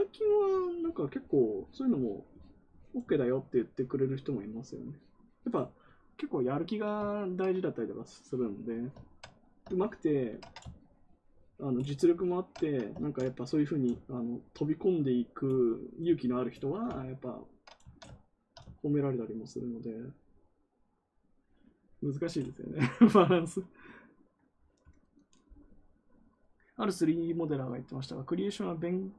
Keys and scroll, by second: 12.9 ctrl+z.